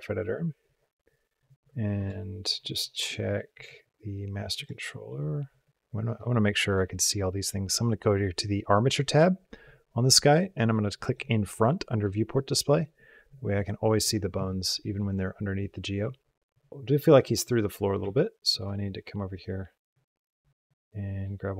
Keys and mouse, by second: 1.7 ctrl+Tab, 4.4 click, 6.5 click, 10.9 click, 16.7 space, 16.9 click, 17.8 a, 20.5-21.5 drag.